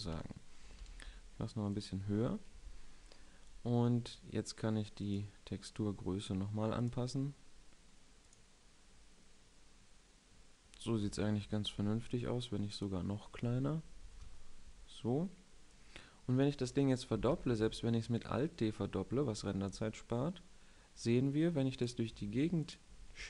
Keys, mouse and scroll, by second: 0.6-1.4 middle drag, 0.6 s, 1.8 click, 2.4 KP_7, 9.1-10.0 middle drag, 11.0 KP_7, 15.6-17.2 drag, 17.2 alt+d, 17.7 right drag, 18.1-19.6 middle drag, 19.6 click, 22.0 s, 22.6-23.2 drag, 23.0 alt+d.